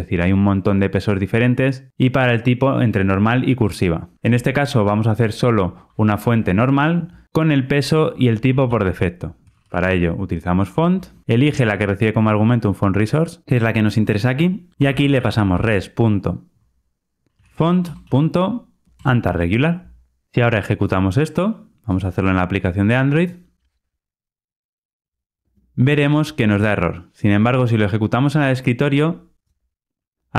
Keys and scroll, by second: 17.7 Return, 23.4 ctrl+r.